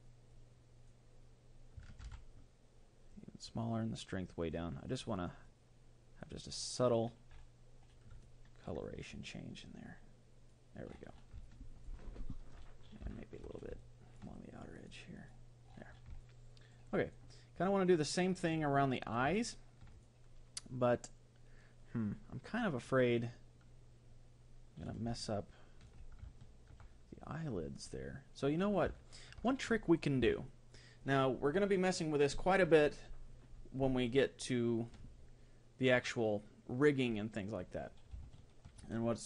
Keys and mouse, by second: 2.1 ctrl+z, 3.1-5.4 drag, 6.8-8.3 drag, 8.3-10.0 middle drag, 9.6-11.5 drag, 11.5-15.7 middle drag, 14.7-16.8 drag, 16.3-21.0 middle drag, 22.1-24.0 middle drag, 25.3-28.1 middle drag, 29.1-34.9 middle drag, 38.3-39.2 middle drag.